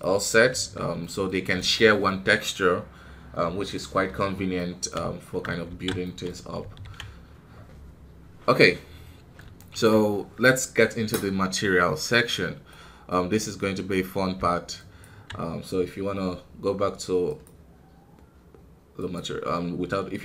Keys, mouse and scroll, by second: 0.3 scroll down 4, 0.5 KP_1, 0.9-5.6 middle drag, 5.6 alt+a, 6.0-7.1 middle drag, 7.1 ctrl+s, 9.1 scroll up 2, 9.5 shift+middle click, 10.0 scroll down 3, 12.6-14.3 middle drag, 14.3 z, 17.2-20.2 drag.